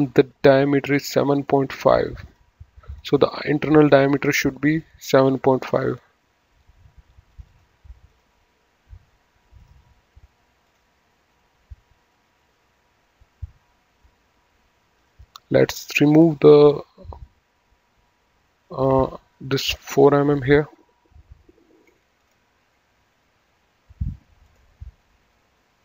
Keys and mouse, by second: 1.3 right click, 2.3 click, 7.2 click, 9.4 click, 15.0 click, 16.3 click, 18.5 click, 21.1 Escape, 22.2 click, 22.6 Delete, 24.4 click.